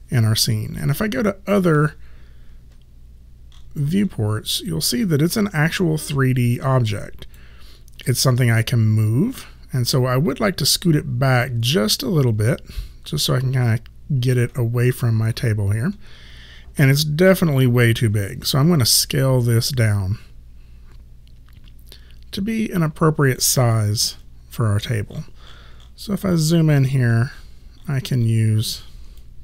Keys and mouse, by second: 0.7 space, 4.7 click, 8.6 click, 18.8 r, 19.7 click, 29.2 click.